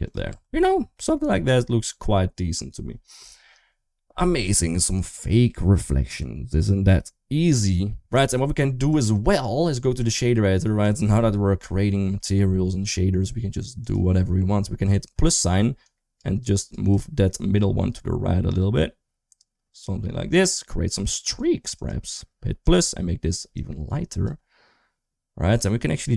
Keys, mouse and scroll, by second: 0.1 Tab, 0.8 middle drag, 8.7-9.9 drag, 10.6 click, 12.1 middle click, 15.6 click, 16.2 click, 16.8-21.2 drag, 21.6 click, 22.4 click.